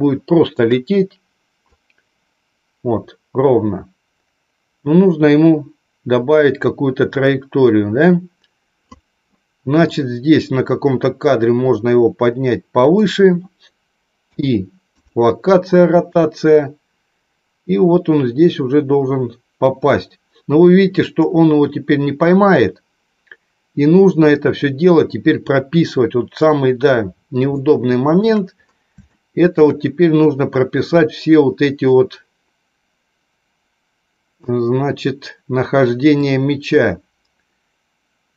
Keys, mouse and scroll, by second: 1.9-9.1 drag, 9.8-13.1 drag, 14.1 i, 16.3-26.7 drag, 27.6 shift+middle click, 29.0 shift+middle click, 32.1-34.6 drag, 36.1-38.3 drag.